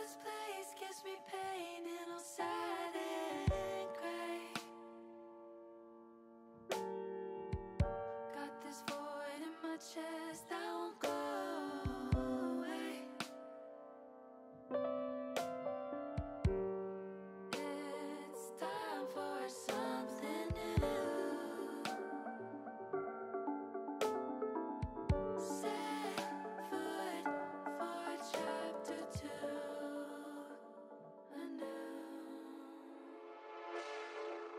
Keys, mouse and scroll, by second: 1.6 ctrl+r, 6.1 click, 7.1 ctrl+r, 20.0 middle click, 21.6 ctrl+r, 27.5 click, 29.0-30.7 middle drag, 31.8 middle click, 34.1-34.5 drag.